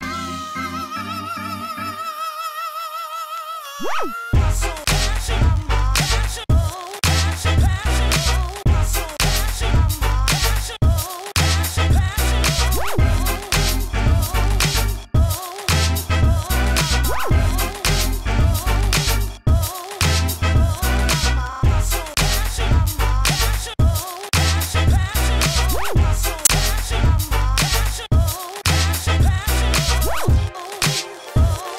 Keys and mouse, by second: 0.2 ctrl+e, 1.4 ctrl+e, 2.1 a, 4.4 f, 4.6 Tab, 8.2 KP_1, 9.6 Tab, 10.3 ctrl+shift+Tab, 10.9 g, 11.7 g, 12.9 click, 13.7 g, 14.5 g, 16.4 g, 16.9 middle click, 17.5 g, 18.4 g, 19.5 ctrl+shift+Tab, 20.1 g, 20.4-21.9 drag, 21.4 ctrl+shift+Tab, 22.0 g, 22.7 Tab, 22.8 Tab, 23.2 g, 23.6 click, 24.0 g, 24.7 g, 24.8 click, 25.0 click, 25.3 Tab, 25.5 g, 25.6 Tab, 26.0 click, 26.5 Tab, 27.3 a, 27.4 middle click, 28.3 middle click, 28.6 Tab, 29.8 g, 30.4 Tab, 31.1 Tab, 31.3 click.